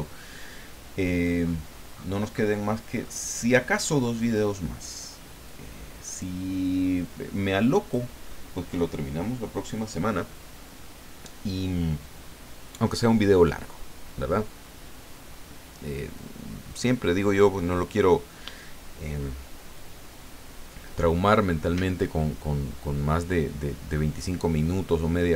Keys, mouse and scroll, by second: 1.4 scroll up 2, 1.9-2.5 scroll down 4, 3.0-3.7 scroll up 4, 4.0 scroll up 2, 5.5 click, 6.7-8.1 drag.